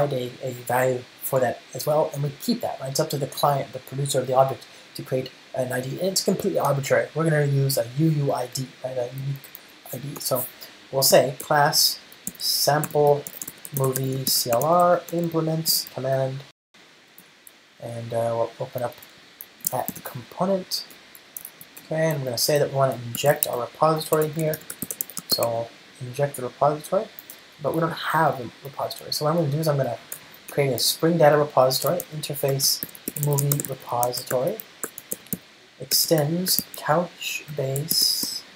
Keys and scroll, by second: 11.5 Return, 17.8 ctrl+i, 21.1 Return, 32.6 Return, 36.2 Return.